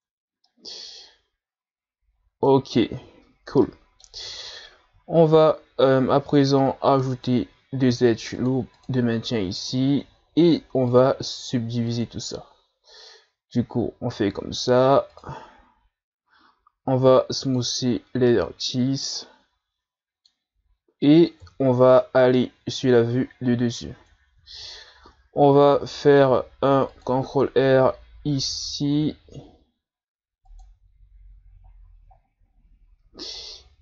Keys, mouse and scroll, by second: 0.5-3.2 middle drag, 3.2-3.6 scroll down 1, 3.6-4.3 middle drag, 4.3 Tab, 6.1 ctrl+r, 7.9 ctrl+r, 9.9 Tab, 10.9-13.9 drag, 15.1-16.8 drag, 16.8 w, 18.3-21.4 middle drag, 21.4 KP_7, 22.4-23.5 scroll up 10, 23.8 Tab, 24.5-25.1 scroll up 1, 26.3 ctrl+r, 31.7-33.1 scroll down 5, 33.6-33.8 scroll down 1.